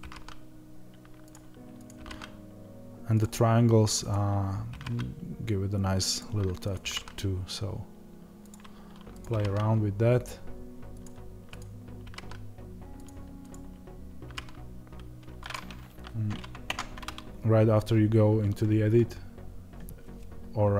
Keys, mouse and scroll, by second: 3.1 click, 6.6 click, 6.7 g, 10.9 click.